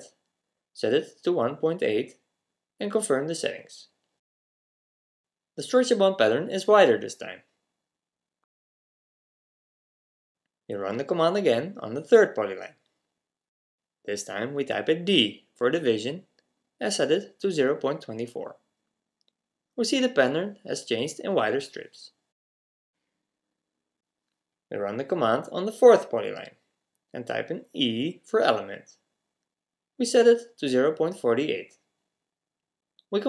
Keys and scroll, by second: 6.4 typing, 7.4-8.2 typing, 10.0 typing, 14.4-15.1 typing, 19.6 typing, 20.7-21.5 typing, 27.4 typing, 32.6 typing.